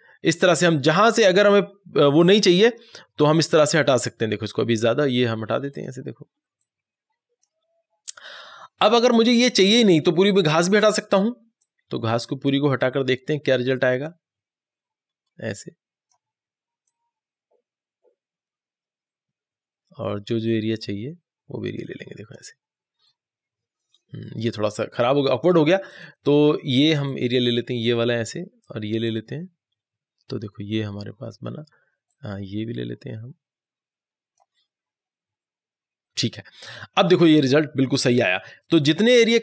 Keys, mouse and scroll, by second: 1.0-3.9 drag, 5.6-31.5 drag, 32.1-39.4 drag.